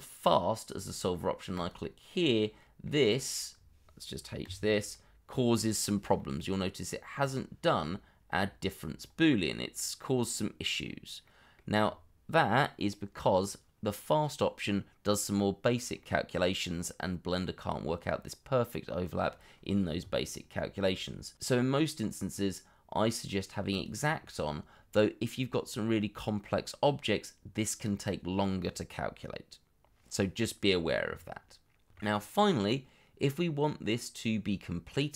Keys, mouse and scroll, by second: 2.6 middle click, 4.4 h, 4.9 middle click, 9.0-9.3 scroll up 1, 9.3 middle click, 10.8-11.2 scroll up 1, 11.2 middle click, 11.8-13.4 scroll down 1, 15.0-15.6 scroll up 1, 15.6-16.0 scroll down 1, 16.0 middle click, 24.6-26.7 scroll down 1, 30.8 scroll up 1, 31.1 middle click, 32.1 scroll up 1, 32.3 middle click.